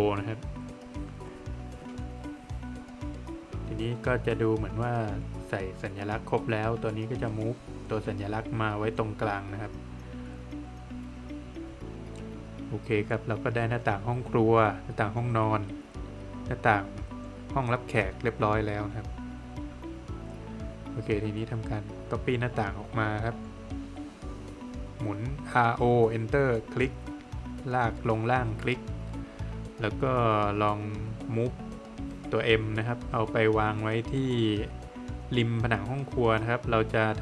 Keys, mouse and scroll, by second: 0.3 scroll down 1, 0.6 middle click, 2.1 middle click, 2.4-3.0 scroll up 1, 3.2 middle click, 4.7 click, 6.5 space, 7.2 click, 9.1 middle click, 10.1 middle click, 10.5 scroll down 1, 11.0 middle click, 11.8 scroll down 1, 12.0 middle click, 13.9 middle click, 16.6 scroll up 1, 17.2 Escape, 18.3 click, 20.4 space, 21.1 click, 22.2 Escape, 22.7 click, 23.2 double click, 25.1 space, 26.1 click, 27.8 click, 29.3 double click, 31.8 space, 34.4 Escape, 35.1 scroll up 1, 35.9 Escape, 36.8 space.